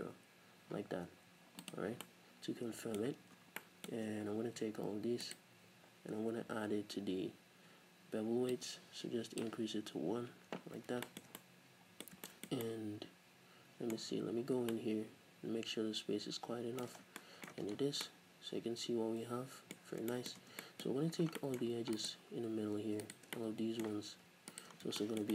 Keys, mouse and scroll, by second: 1.7 click, 2.6-5.2 middle drag, 3.4 Tab, 4.1 Tab, 4.1-5.1 scroll up 2, 5.1 scroll up 1, 5.2 alt+right click, 6.8 n, 8.5-11.1 drag, 10.1 n, 10.8-11.1 scroll down 2, 11.1-17.8 shift+middle drag, 14.0-14.7 scroll up 2, 17.0 scroll down 2, 17.7 Tab, 17.8 scroll down 2, 18.0-20.0 middle drag, 20.0 scroll up 2, 20.1-20.5 shift+middle drag, 20.5 Tab, 20.6 middle click, 20.9-21.4 scroll up 2, 21.4 middle click, 22.0 alt+right click, 23.0 alt+right click, 23.4-24.5 middle drag, 24.5 alt+right click, 24.8 scroll down 1, 25.0-25.3 shift+middle drag.